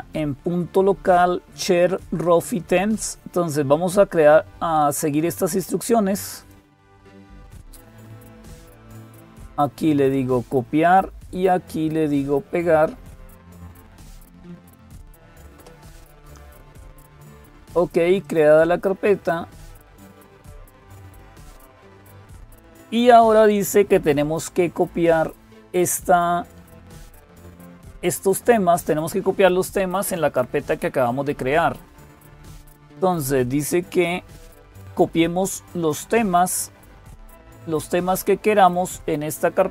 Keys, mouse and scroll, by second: 0.0-39.7 typing, 2.6-4.8 drag, 14.6 Right, 15.3 Return, 18.0 click, 32.2 click.